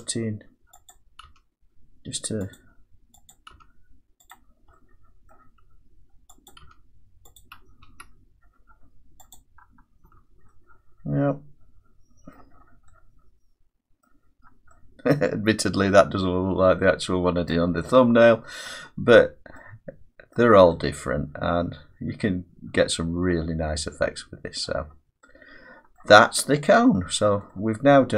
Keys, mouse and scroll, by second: 0.0 click, 0.9 click, 1.3 g, 2.6 click, 3.3 click, 3.5 g, 4.3 click, 5.3 middle click, 6.5 click, 6.7 g, 7.4 click, 7.9 `, 9.4 click, 10.1 Tab, 11.0 `, 12.3 middle click, 12.5-12.9 scroll down 4, 12.9-13.5 scroll, 14.0 middle click, 14.7-15.6 scroll, 17.5 middle click, 17.9-18.7 scroll, 18.7 middle click, 19.1-20.3 scroll, 20.3 scroll down 5, 20.4 middle click, 24.6 middle click, 24.8-25.4 scroll down 3, 26.0 middle click, 27.1-27.5 scroll up 5, 27.5-28.0 scroll down 1, 28.0 middle click, 28.0 scroll down 1.